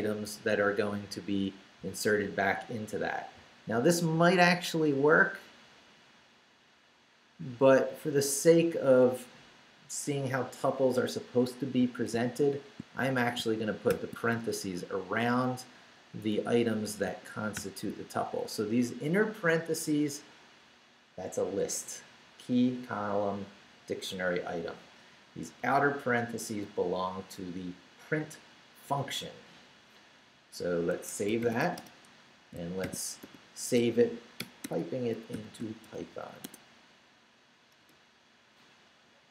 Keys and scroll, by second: 11.8 i, 13.1 shift+BackSpace, 13.9 shift+9, 14.8 shift+Right, 16.4 Right, 17.0 shift+Right, 17.5 shift+0, 18.2 shift+Left, 18.9 Left, 25.6 Right, 30.9 Escape, 31.2-36.5 typing, 32.5 shift+Return, 37.8 Return.